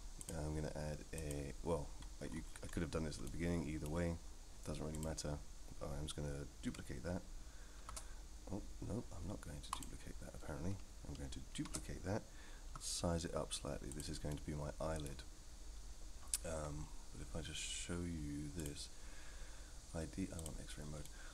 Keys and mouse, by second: 0.3-1.3 drag, 3.2-3.8 middle drag, 4.9 click, 7.8 shift+s, 11.5 shift+d, 14.3-15.0 middle drag, 18.6 click, 21.1-21.3 middle drag.